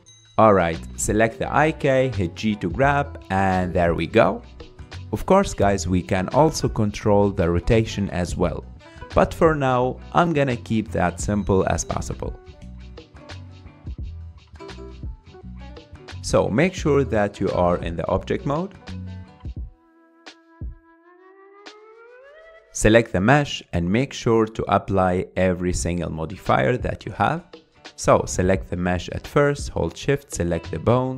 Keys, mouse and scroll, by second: 0.9 click, 2.1 g, 6.1 scroll down 4, 6.3-6.8 middle drag, 6.8 g, 12.2-15.3 middle drag, 17.0 Tab, 17.7 Tab, 18.3 ctrl+Tab, 18.8 ctrl+Tab, 19.0 ctrl+Tab, 19.8-20.8 scroll up 1, 20.8-22.0 drag, 22.0 scroll up 1, 22.3-23.1 shift+middle drag, 23.1 click, 24.8 click, 26.5-27.9 drag, 27.9 Tab, 28.7 Tab, 30.4 click.